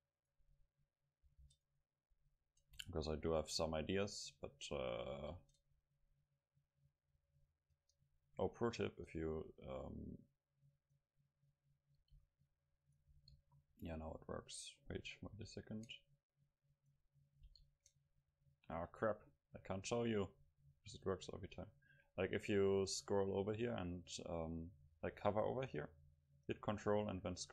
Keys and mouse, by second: 0.2-3.6 drag, 1.3 ctrl+t, 2.9 ctrl+z, 3.1 ctrl+z, 5.2 ctrl+t, 10.0 middle click, 12.0 ctrl+t, 13.2 ctrl+t, 15.4 ctrl+t, 16.2 middle click, 16.8 right click, 17.1-18.1 right drag, 17.5 ctrl+t, 18.2 right click, 18.3 middle click, 18.4 right click, 18.5 middle click.